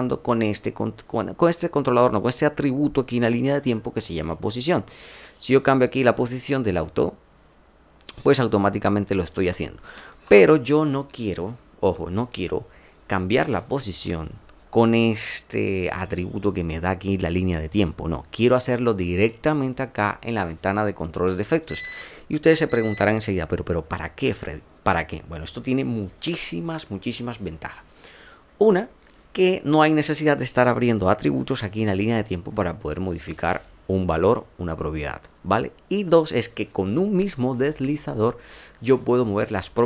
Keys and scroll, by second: 10.0 ctrl+z.